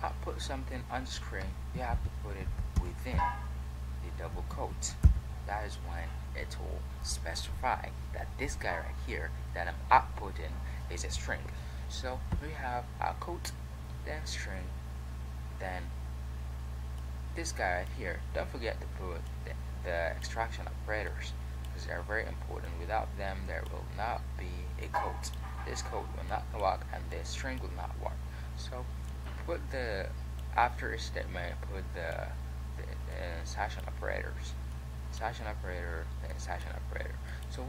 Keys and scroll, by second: 0.1 q.